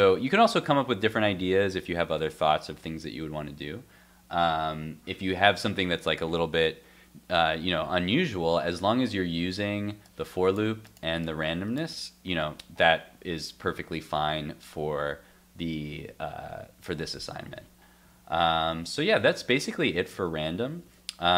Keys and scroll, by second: 8.2 super+Tab, 18.6 super+s, 19.1 super+Tab, 20.8 super+Tab.